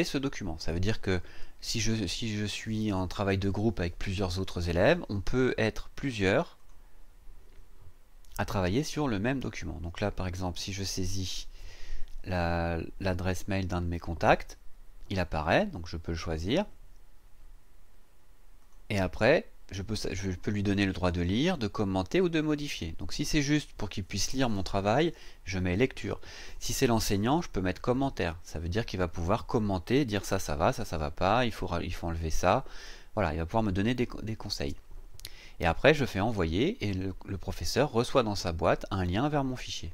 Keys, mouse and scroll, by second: 6.5 click, 10.4-11.3 typing, 16.3 click, 18.6 click.